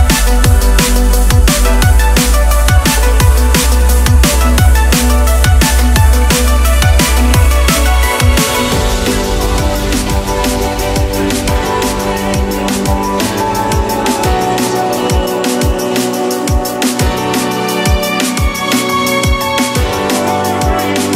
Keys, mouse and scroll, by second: 0.6 click, 2.4 click, 13.1 click, 15.4 click.